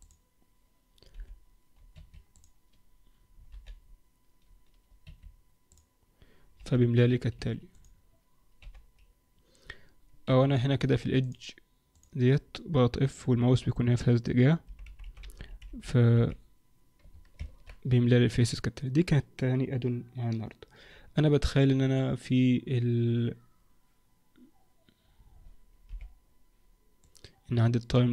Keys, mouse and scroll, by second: 0.0 click, 1.2 f, 2.3 click, 3.5 f, 5.6 click, 6.6 f, 7.7 click, 8.6 f, 11.2 click, 11.9 click, 14.6 f, 14.8-16.2 f, 17.4 ctrl+z, 25.8 t, 27.0 click.